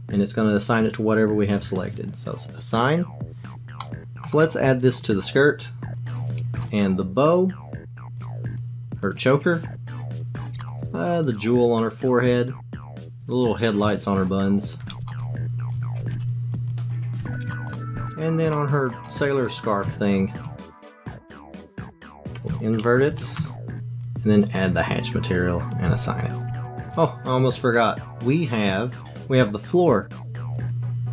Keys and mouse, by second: 2.2 click, 3.5 Tab, 3.8 middle click, 4.2 click, 5.9 click, 6.7 click, 8.2 click, 9.1 click, 9.9 click, 10.6 shift+middle click, 12.4 click, 13.3 click, 13.8 Tab, 15.0 alt+click, 15.7 click, 16.1 ctrl+i, 16.5 click, 16.9 click, 17.2 Tab, 17.5 shift+middle click, 17.7 middle click, 18.6 middle click, 19.3 click, 19.8 Tab, 20.7 shift+click, 21.0 shift+click, 21.3 ctrl+click, 21.4 ctrl+click, 21.5 ctrl+click, 21.6 ctrl+shift+click, 21.9 ctrl+click, 23.1 ctrl+i, 23.7 click, 24.0 click, 25.8 click, 26.5 Tab, 26.8 shift+click, 28.6 click, 30.5 click.